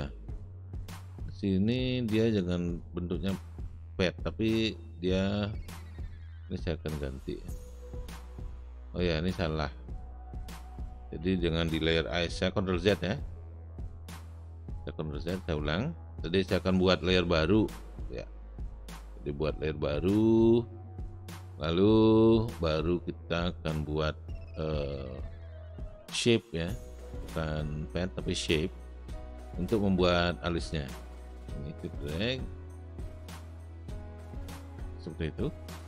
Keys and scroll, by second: 12.7 ctrl+z, 14.2 ctrl+z, 14.7 ctrl+z, 15.2 ctrl+z.